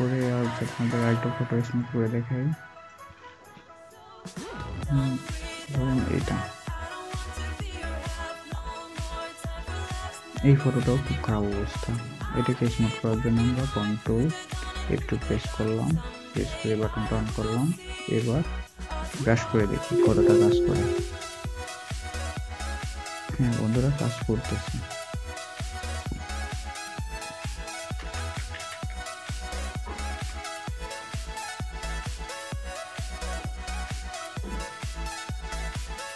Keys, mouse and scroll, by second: 6.2 double click, 10.8 alt+scroll, 10.8-11.5 alt+scroll up 1, 14.7 shift+F2, 18.5-19.6 scroll down 1, 19.6 scroll down 1, 19.8 typing, 23.7 typing, 27.4 scroll up 1, 27.5-30.1 typing, 32.6-33.3 typing.